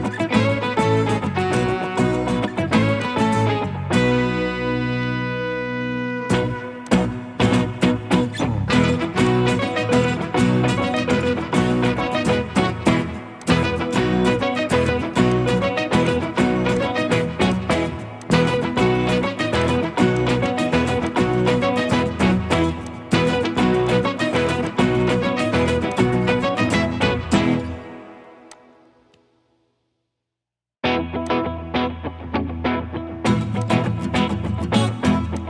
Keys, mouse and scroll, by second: 13.8 middle click, 15.3 double click, 22.2-22.6 typing.